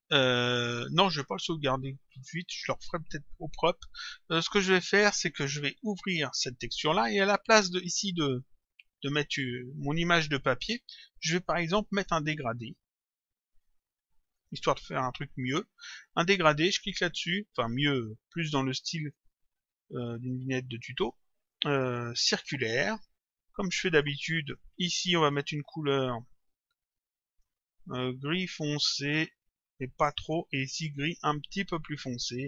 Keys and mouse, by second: 5.8 click, 12.0 click, 14.4 click, 16.8 click, 19.0 click, 22.2 click, 23.9 click, 28.3 click, 30.0 click.